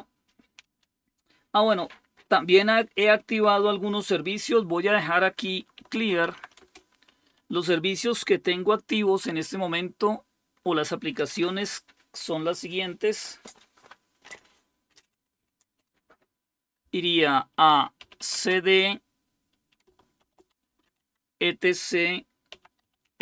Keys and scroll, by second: 5.5-6.9 typing, 17.8-18.7 typing, 20.0-21.3 typing, 22.5-23.2 typing.